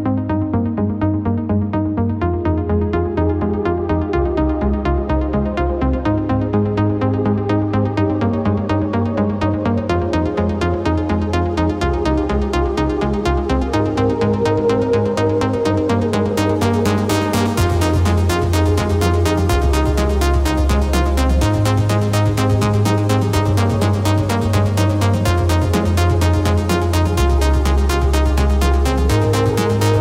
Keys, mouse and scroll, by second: 0.1 ctrl+click, 0.7 ctrl+click, 1.3 click, 7.0 click, 7.7 ctrl+click, 8.2 ctrl+click, 9.9 click, 14.8 click, 22.1 click, 23.7 click, 27.8 click, 29.5 click.